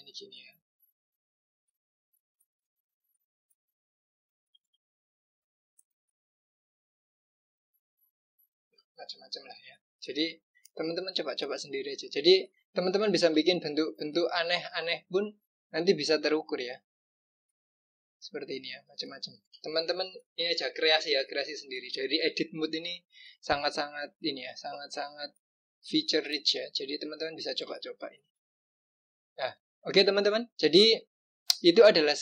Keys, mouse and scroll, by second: 3.0 click, 8.6 click, 9.0-9.8 scroll down 2, 9.8-11.1 scroll down 2, 11.1 click, 13.7-14.4 scroll up 4, 15.5 click, 22.8-23.7 scroll down 2, 23.7-24.3 scroll down 2, 24.3-25.1 scroll up 2, 25.1-26.6 scroll up 1, 26.6 click, 27.9-28.8 scroll down 1, 28.8-29.6 scroll down 1, 29.6 click.